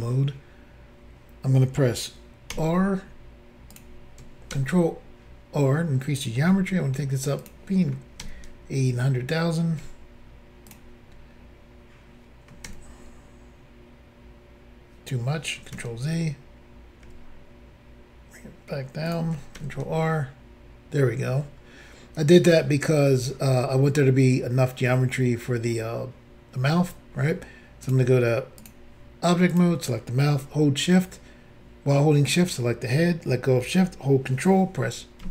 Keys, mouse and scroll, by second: 2.5 r, 3.7 click, 4.5 ctrl+r, 6.5 r, 7.4 click, 8.2 ctrl+r, 9.8 r, 10.7 click, 12.7 ctrl+r, 15.7 ctrl+z, 17.0 r, 19.1 click, 19.1 click, 19.6 ctrl+r, 23.3-24.5 scroll up 1, 27.8 click, 27.9 click, 28.6 click, 28.6 click, 29.5 click, 29.5 click, 32.2 shift+click, 35.2 ctrl+j.